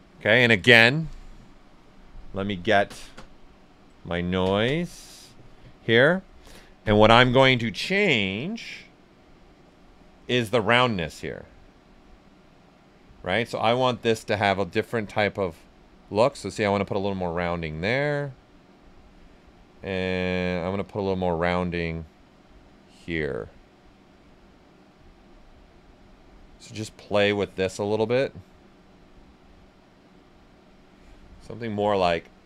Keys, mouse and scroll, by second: 5.9-8.3 drag, 8.3-14.1 drag, 14.1-17.5 drag, 17.5-19.6 drag, 19.6-32.4 drag, 24.2 typing.